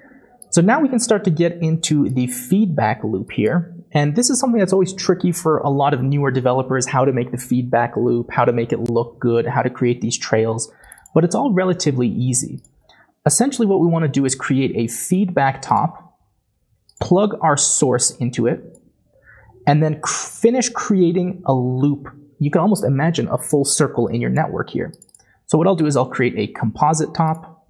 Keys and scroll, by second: 13.2-14.5 typing, 16.3 typing, 25.8 typing.